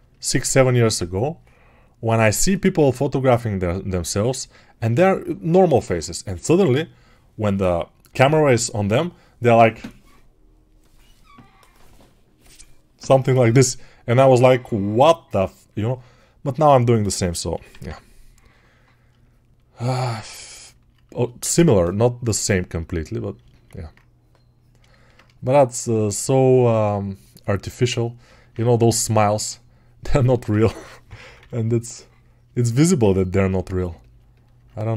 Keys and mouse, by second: 15.5 alt+right click, 23.5-26.3 ctrl+alt+drag, 33.4-34.9 alt+right drag.